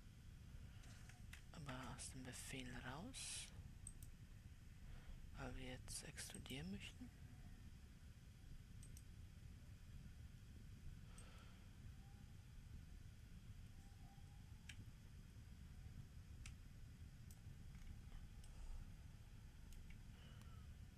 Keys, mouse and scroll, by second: 1.8 Escape, 2.3 Escape, 4.4-14.9 drag, 18.3-19.0 scroll down 3, 19.0-20.9 middle drag.